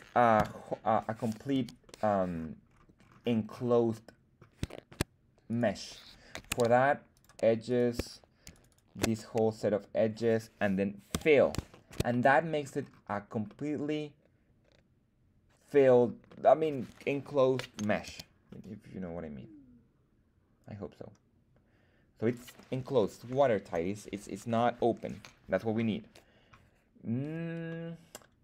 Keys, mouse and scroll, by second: 0.3 /, 1.2 scroll up 1, 1.2 ., 1.4 z, 1.8 middle click, 3.0 scroll down 4, 3.2-4.4 scroll up 4, 4.7 shift+middle click, 5.8 right click, 6.7 ctrl+Tab, 7.6 click, 7.6 right click, 8.4 alt+shift+click, 8.4 alt+shift+right click, 9.1-10.3 middle drag, 11.0 f, 11.6 shift+middle click, 12.0 middle click, 12.7-13.1 scroll down 5, 13.6-15.9 middle drag, 16.3 middle click, 18.0 z, 18.4-22.3 middle drag, 27.6-28.4 middle drag.